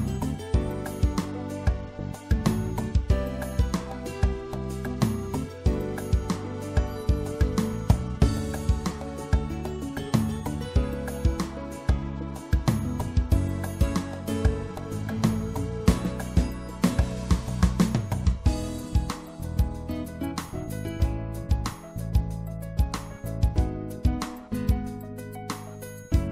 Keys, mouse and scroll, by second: 1.6 middle click, 2.1-3.8 drag, 3.8 right click, 4.7-6.1 middle drag, 8.5-11.2 drag, 10.8 e, 11.2 right click, 11.3-13.6 middle drag, 13.6 click, 14.5-18.0 middle drag, 18.4-22.2 drag, 22.4-23.8 middle drag, 24.8-26.3 drag.